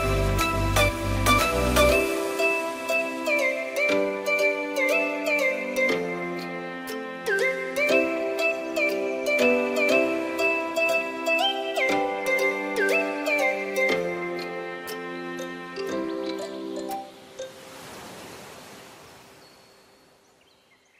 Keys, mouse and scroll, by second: 4.4 BackSpace, 6.1 click, 8.5-10.6 middle drag, 10.6 KP_3, 10.9 KP_1, 11.7-12.5 scroll up 1, 12.5 click, 15.9-20.8 drag.